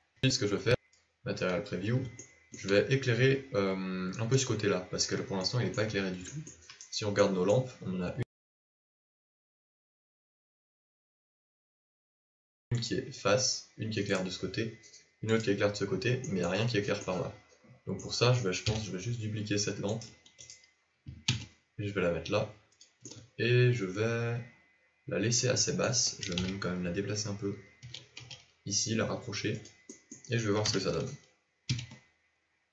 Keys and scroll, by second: 18.6 KP_7, 21.3 shift+d, 26.3 KP_7, 27.8 g, 30.6 KP_0, 31.6 z.